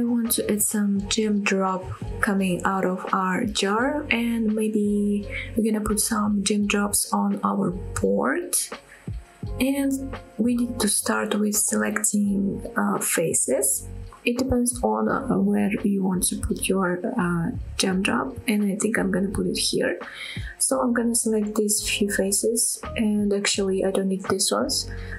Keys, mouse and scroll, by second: 1.3 click, 1.7-2.3 scroll down 2, 2.3-3.0 scroll up 2, 3.0 Tab, 3.6 middle click, 4.4-4.8 scroll down 2, 6.6 middle click, 7.1 scroll up 2, 7.6 shift+middle click, 8.0 scroll up 1, 8.3 middle click, 9.0 middle click, 9.8 scroll up 1, 9.9 middle click, 10.3 scroll down 1, 13.0 click, 13.3 middle click, 14.2-14.8 scroll down 3, 14.9-15.5 scroll up 4, 15.7 click, 16.8 shift+click, 17.3 shift+click, 17.8 shift+click, 18.3 middle click, 19.5 shift+click, 20.3 middle click, 22.1 middle click, 22.7 shift+click, 23.2 middle click, 24.3 shift+click, 24.7 middle click.